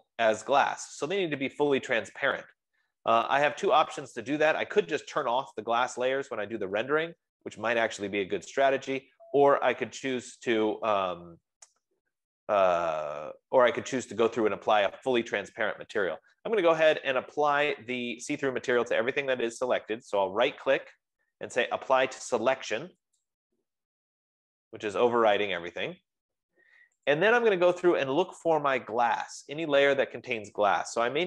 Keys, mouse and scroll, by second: 2.4 F15, 20.6-23.6 right drag, 23.6 click, 28.0 click.